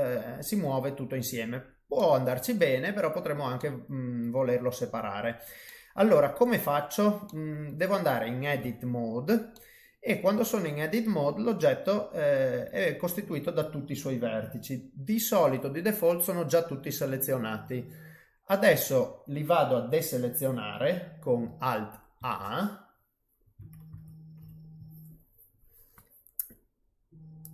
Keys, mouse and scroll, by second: 1.5-1.9 scroll up 1, 1.9 middle click, 2.8 scroll up 2, 3.5 middle click, 4.4-4.9 scroll down 3, 5.0-5.6 scroll up 3, 5.6 middle click, 6.6-7.2 scroll down 2, 7.2 middle click, 8.6 Tab, 9.5 middle click, 22.2 alt+a.